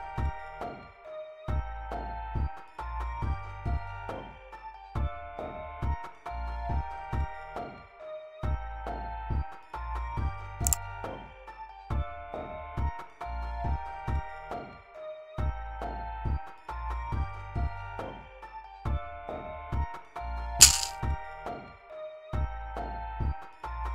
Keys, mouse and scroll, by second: 10.5 click, 12.3 click, 13.6 click, 14.9 click, 16.2-17.8 drag, 21.1 click.